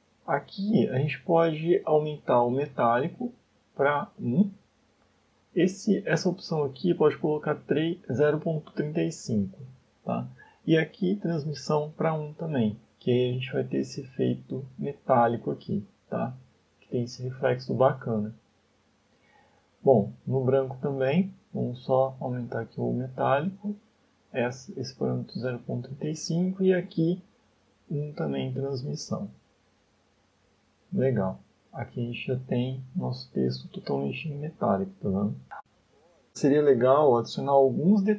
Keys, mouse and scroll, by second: 1.7 click, 4.7 click, 10.1 click, 11.6 middle click, 18.4 shift+middle click, 20.1 click, 21.2 click, 22.5 click, 26.2 click, 27.4 middle click, 27.8 scroll up 2, 28.3 middle click, 30.2 scroll down 2, 31.1 shift+middle click, 33.6 ctrl+space, 34.1 middle click, 34.8 shift+middle click, 35.7 middle click, 37.8 shift+middle click.